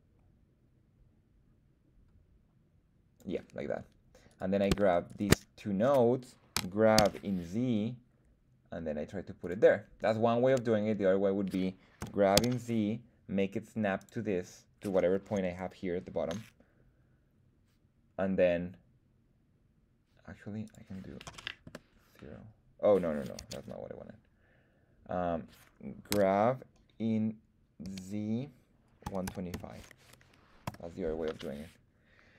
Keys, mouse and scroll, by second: 4.2 right click, 5.0 shift+right click, 6.5 g, 6.9 z, 9.3 click, 12.0 g, 12.3 z, 13.9 click, 20.6-23.8 drag, 23.3 super+z, 26.1 g, 27.8 z, 29.0 KP_1, 29.2 KP_2, 29.5 KP_5, 30.6 Return.